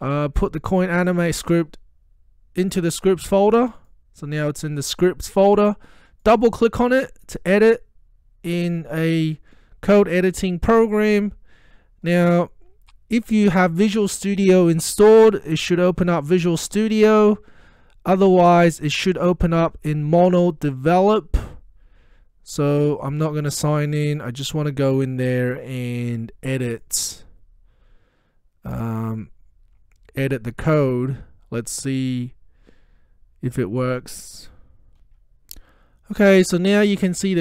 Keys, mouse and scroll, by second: 0.6-2.9 drag, 6.3 click, 23.9-26.1 drag, 26.8 click, 29.1 click, 35.1 F9.